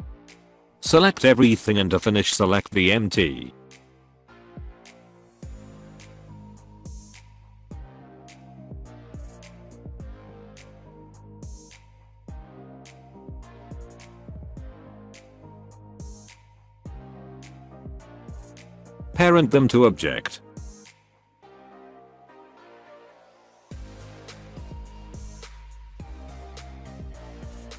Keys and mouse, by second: 0.5 click, 2.6 click, 4.0 click, 4.8 shift+click, 5.9 shift+click, 6.6 middle drag, 7.1-7.4 middle drag, 7.9-8.3 middle drag, 8.5 middle click, 9.0 click, 9.8-10.3 middle drag, 11.0 middle click, 12.5 middle drag, 13.0 shift+click, 13.4 middle drag, 13.8-14.2 middle drag, 16.8 middle click, 19.3 ctrl+p, 23.0 click, 24.8 r, 27.2 ctrl+z.